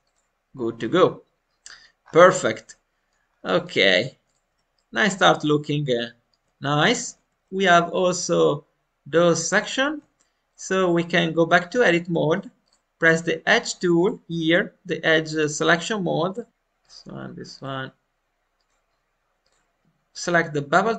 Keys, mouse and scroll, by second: 0.0 click, 0.7-1.9 middle drag, 1.9-2.4 scroll up 1, 2.4 middle click, 3.2-3.5 scroll up 2, 3.5 click, 4.4 Tab, 4.7-7.2 middle drag, 7.5 middle click, 7.5 scroll down 1, 10.0 middle click, 10.4 click, 10.7 Tab, 12.2-13.5 drag, 15.3-16.5 ctrl+drag.